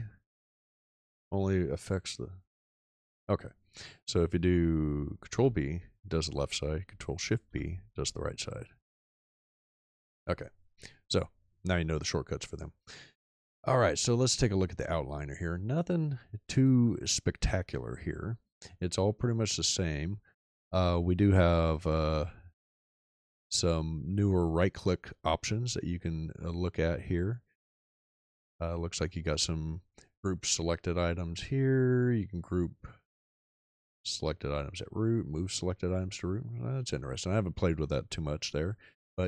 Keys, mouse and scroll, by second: 2.2 ctrl+shift+b, 5.4 ctrl+b, 7.4 ctrl+shift+b.